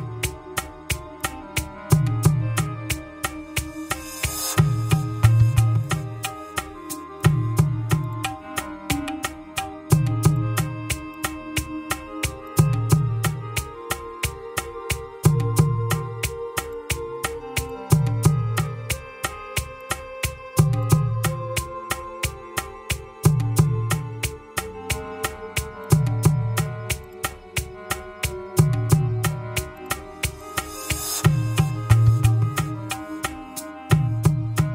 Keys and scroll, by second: 5.1 ctrl+c, 14.1 ctrl+v, 18.9 ctrl+c, 21.7 ctrl+v, 23.1 Return.